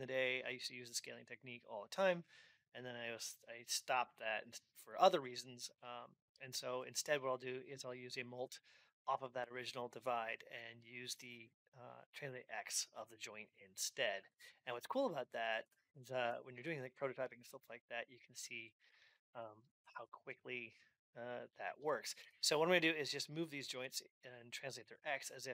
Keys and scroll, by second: 15.4 Return, 18.8 Down, 19.1 ctrl+Up.